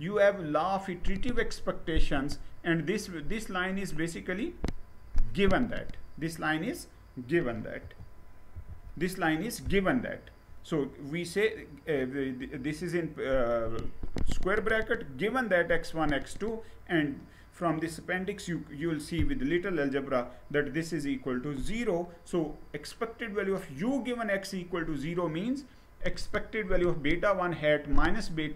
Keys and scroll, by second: 7.4 ctrl+z, 8.2 ctrl+z.